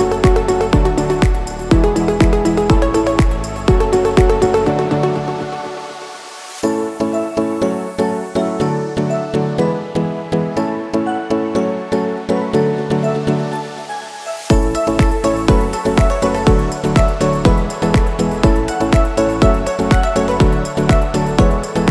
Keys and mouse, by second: 0.3 ctrl+s, 0.6 a, 0.7 a, 1.5 click, 2.3 drag, 2.6 click, 3.3 click, 4.0 click, 4.5 click, 5.1 middle click, 7.4 click, 8.3 shift+s, 12.3 middle click, 13.4 click, 13.9 click, 14.8 middle click, 16.2 click, 17.0-18.0 drag, 19.3 ctrl+s, 19.6 a, 19.8 a.